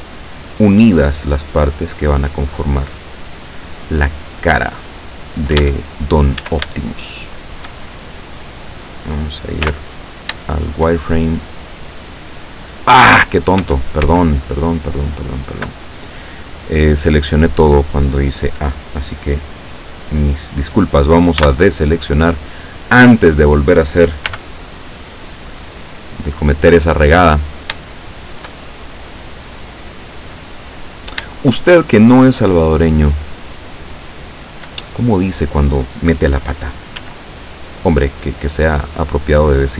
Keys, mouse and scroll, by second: 3.0-5.2 drag, 5.6 Caps_Lock, 6.1-6.6 shift+scroll up 1, 6.5 Caps_Lock, 6.9 shift+middle click, 7.7 shift+scroll up 2, 9.7 z, 11.2 shift+scroll down 3, 11.5-13.2 middle drag, 13.2 ctrl+z, 21.5 a, 24.3 b, 24.9-26.5 drag, 28.0-31.3 shift+middle drag, 31.7 shift+right click, 32.6 shift+right click, 33.6 shift+right click, 34.4 shift+right click, 34.9 shift+middle click, 37.0 s, 38.7 click.